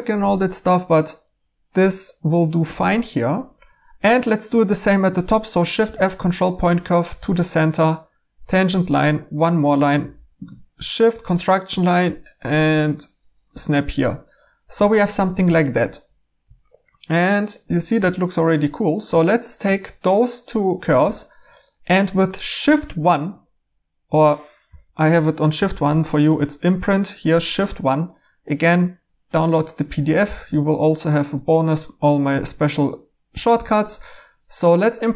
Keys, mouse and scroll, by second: 0.0-0.7 typing, 2.6 2, 5.8 f, 13.5 1, 14.7 2, 15.2 2, 17.9 2, 24.6-25.8 typing.